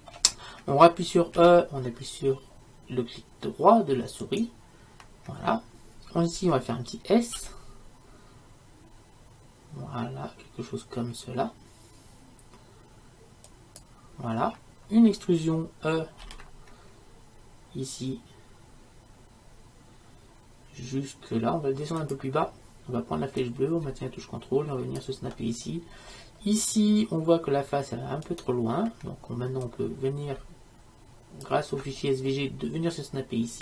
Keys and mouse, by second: 1.5 e, 7.5 s, 16.3 e, 26.0-28.4 middle drag, 30.3-31.5 drag.